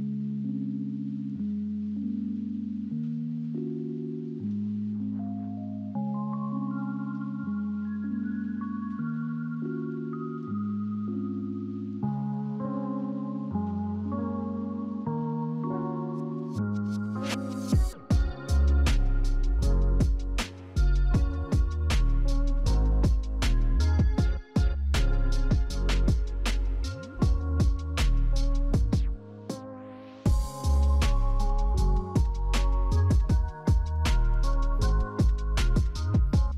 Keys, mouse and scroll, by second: 18.7 double click, 23.3 8, 23.5 Return, 36.1 double click.